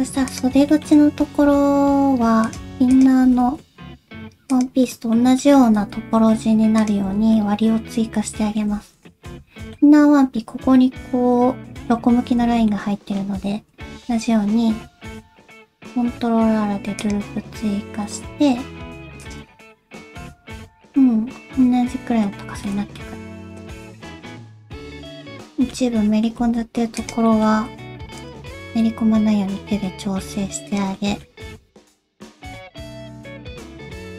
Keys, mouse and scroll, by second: 0.3 click, 0.7 shift+middle click, 1.2 g, 2.9 click, 3.2 g, 4.8 middle click, 5.4 shift+middle click, 5.9 z, 7.1 alt+z, 7.3 middle click, 8.8 alt+z, 9.1 alt+z, 9.3 middle click, 12.4 alt+z, 12.7 middle click, 14.0 ctrl+r, 19.5 alt+z, 19.7 middle click, 22.5 alt+z, 22.6 middle click, 23.1-23.6 scroll up 1, 23.6 click, 23.8 middle click, 24.0 g, 24.9 middle click, 25.2 middle click, 25.9 middle click, 26.4 alt+s, 27.3 middle click, 27.5 g, 28.5 click, 28.8 middle click, 29.8 middle click, 30.7 click, 30.9 middle click, 31.4 g, 32.1 middle click, 32.7 middle click, 33.4 click, 33.6 g, 34.0 scroll down 1, 34.1 middle click.